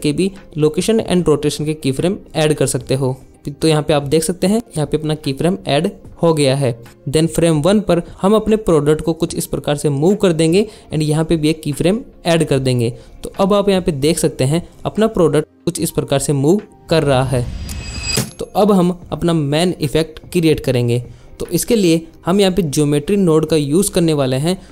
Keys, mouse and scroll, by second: 8.0 shift+Left, 13.0 space, 20.2 alt+shift+z, 23.6-24.7 drag.